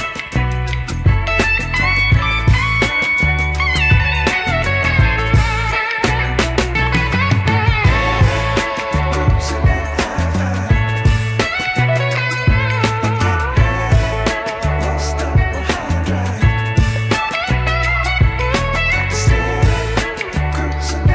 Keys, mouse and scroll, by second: 0.2 KP_1, 1.5 click, 1.7 Tab, 2.2 middle click, 3.2 shift+middle click, 5.3 middle click, 5.9 KP_3, 6.2 Tab, 6.8 KP_1, 7.6 g, 9.9 s, 14.6 scroll up 2, 14.8 shift+middle drag, 15.9 a, 17.0 click, 17.4 click, 18.2 s.